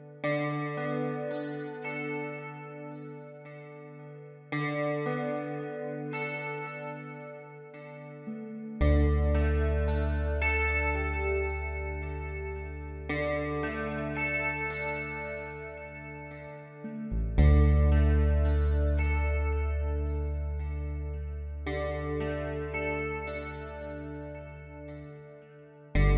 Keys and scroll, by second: 19.2 v, 20.1 space, 23.9 space.